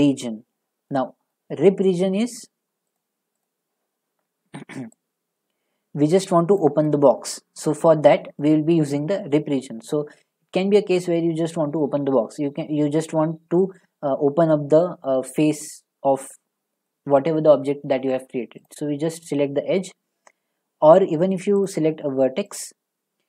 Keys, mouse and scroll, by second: 0.0 click, 0.0 scroll, 1.3-2.4 scroll, 2.4 click, 3.0 click, 3.5 click, 6.6 click, 7.8 click, 8.4-11.5 middle drag, 18.6 middle click, 18.6 click, 21.6 click, 22.6 click.